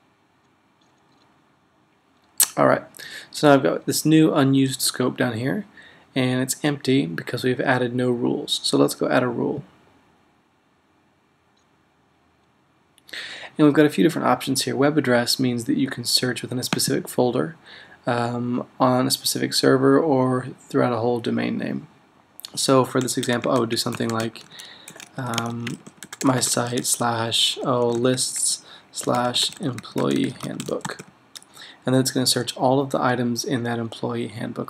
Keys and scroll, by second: 23.5-31.4 typing.